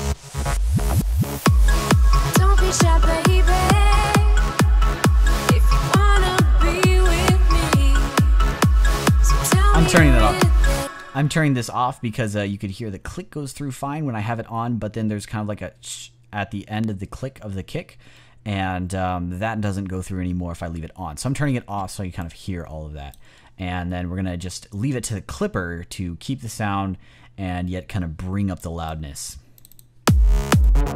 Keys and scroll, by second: 10.6 space, 14.2 space.